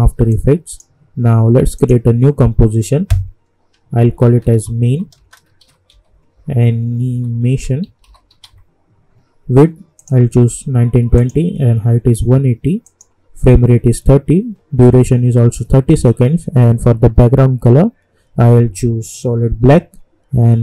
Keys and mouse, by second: 3.8-8.9 typing, 10.0 click.